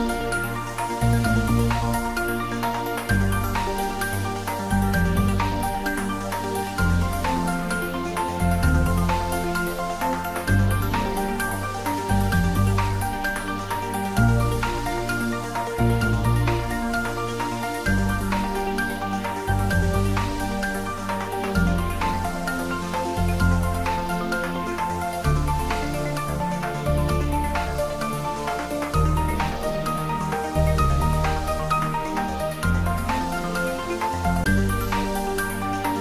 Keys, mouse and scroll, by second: 0.7 click, 2.7-4.0 scroll up 1, 4.6 ctrl+b, 7.2 click, 9.4 ctrl+b, 11.1-14.9 drag, 12.1-14.9 drag, 17.1 Tab, 17.5-18.1 scroll down 1, 18.9-23.6 middle drag, 27.1 click, 27.7 scroll down 1, 29.2 g, 29.7 z, 32.2 click, 32.6-35.7 middle drag, 35.7 g.